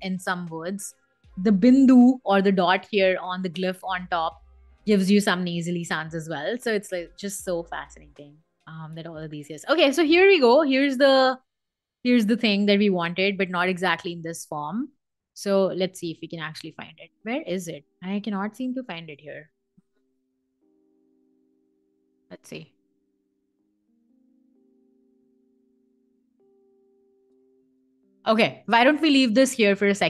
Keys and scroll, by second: 12.5 super+z.